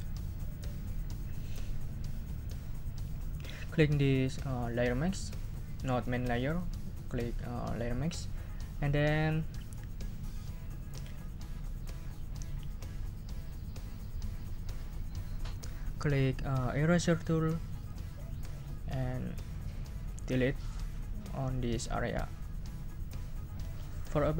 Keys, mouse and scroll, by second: 5.4 click, 6.0 click, 6.4 click, 17.8 click.